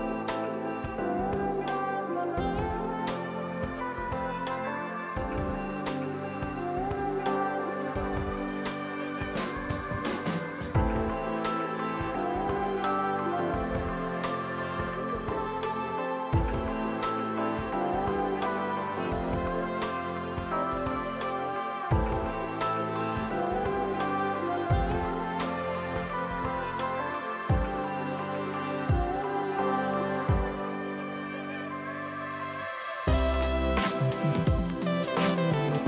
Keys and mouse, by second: 2.3 click, 2.8 click, 3.5 ctrl+e, 3.7 click, 3.9 ctrl+click, 4.1 Delete, 4.7 ctrl+q, 5.3 click, 6.1 click, 6.6 ctrl+q, 6.7 click, 7.8 ctrl+e, 8.0 click, 8.4 ctrl+q, 8.6 click, 9.8 ctrl+shift+x, 10.0 click, 11.4 ctrl+q, 11.9 click, 14.4 ctrl+shift+x, 14.5 Escape, 14.6 click, 15.1 ctrl+q, 15.4 click, 20.2 shift+click, 20.8 ctrl+shift+x, 21.0 click, 21.8 ctrl+q, 21.9 click, 23.4 ctrl+e, 23.4 click, 24.1 ctrl+q, 24.2 click, 24.4 ctrl+q, 24.5 click, 25.0 ctrl+z, 25.1 click, 29.9 click, 30.5 click, 31.1 Escape, 31.4 click, 31.6 ctrl+shift+x, 31.7 click, 32.5 Escape, 32.6 click, 32.9 ctrl+1, 33.8 Escape, 33.9 click, 35.0 ctrl+click.